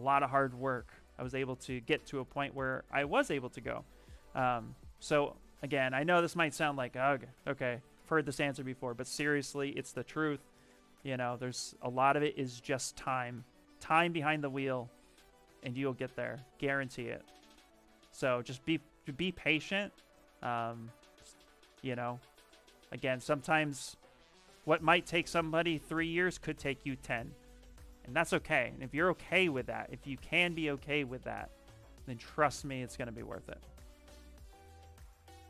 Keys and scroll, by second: 10.1 w, 12.6 q, 13.4 s, 29.9 s, 34.5 ctrl+z.